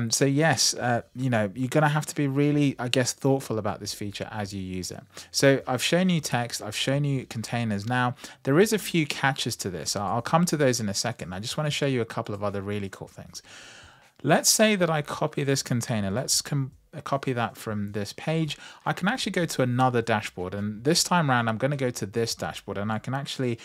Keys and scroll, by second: 16.0 super+c.